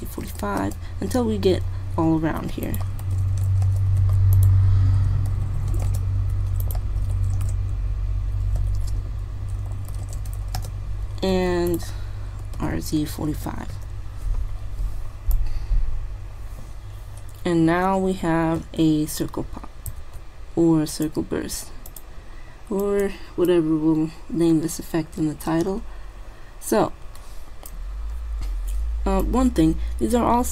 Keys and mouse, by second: 2.3 shift+d, 3.1 r, 4.1 shift+d, 5.3 r, 6.4 shift+d, 7.0 r, 9.0 ctrl+z, 10.0 r, 11.4 shift+d, 12.5 r, 15.5-17.3 drag, 20.0 alt+a, 21.0-22.1 drag, 23.7-25.3 drag, 29.4-30.5 drag.